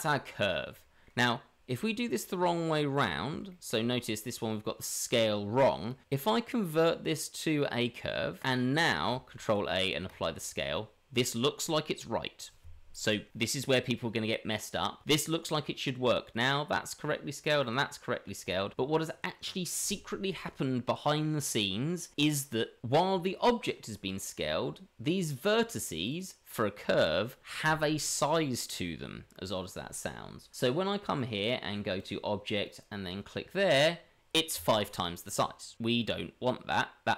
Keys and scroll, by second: 9.3 ctrl+a, 24.0 Tab, 26.9 Tab.